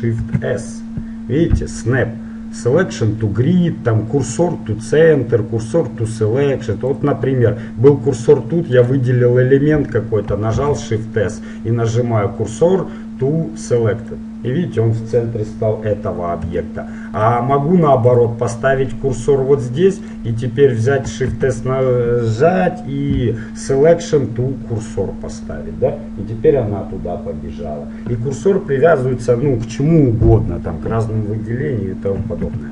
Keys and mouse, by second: 0.2 shift+s, 7.0-8.9 drag, 8.9-10.5 right drag, 10.5 shift+s, 16.8 middle click, 18.1-20.1 drag, 20.2-21.9 right drag, 21.3 shift+s.